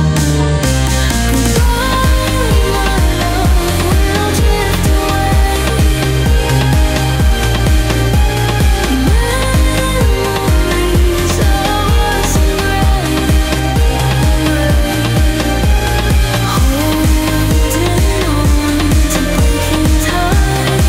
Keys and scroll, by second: 1.4 ctrl+g, 2.1 ctrl+z.